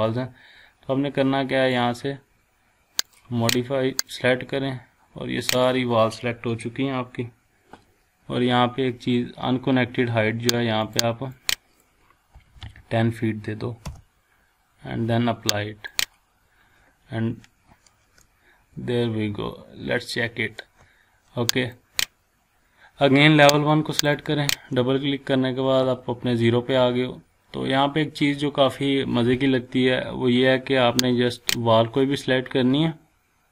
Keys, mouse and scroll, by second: 3.1-5.9 drag, 10.8 click, 12.3 typing, 13.8 Return, 15.9 click, 18.2-20.7 shift+middle drag, 21.6 click, 24.0 click, 27.8 scroll up 1, 31.4 click.